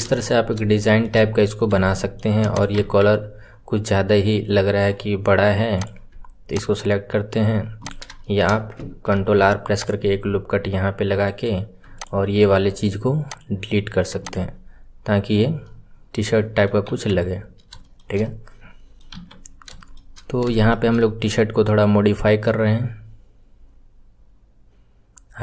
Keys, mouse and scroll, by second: 0.1 scroll up 3, 0.7-1.2 shift+middle drag, 1.2-1.8 scroll up 2, 1.8-2.4 shift+middle drag, 2.4 click, 5.7 click, 7.8 click, 8.1-9.1 shift+middle drag, 9.1 ctrl+r, 11.9 alt+click, 13.4-14.1 right drag, 14.1 click, 14.4 scroll down 2, 15.6-16.8 middle drag, 16.8 KP_1, 17.4-17.8 scroll down 1, 17.8-19.1 shift+middle drag, 19.1 KP_1, 19.4-19.7 scroll up 5, 19.7 shift+middle click, 20.1-20.5 scroll up 4, 20.5-23.9 shift+middle drag.